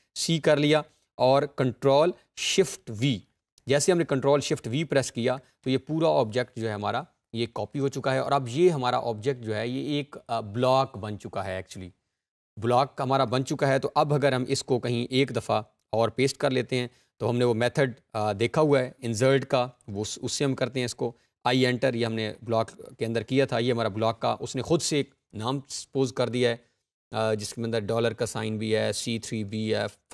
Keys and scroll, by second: 1.8 ctrl+shift+v.